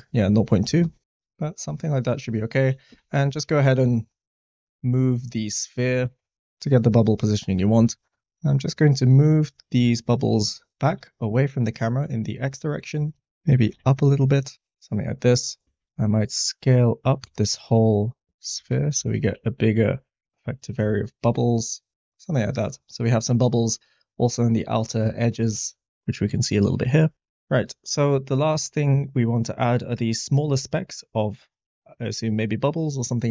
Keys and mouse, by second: 2.5 g, 2.6 z, 2.8 z, 3.8 click, 4.2 drag, 4.6 middle click, 6.3 g, 6.9-7.6 middle drag, 7.8 middle click, 8.2 Tab, 8.2 middle click, 9.0 middle click, 9.7 middle click, 10.7 g, 10.8 x, 12.0 click, 13.5 g, 13.6 z, 15.6 Tab, 16.0 a, 17.2 s, 18.0 click, 18.5 Tab, 19.0 g, 19.1 z, 21.9 g.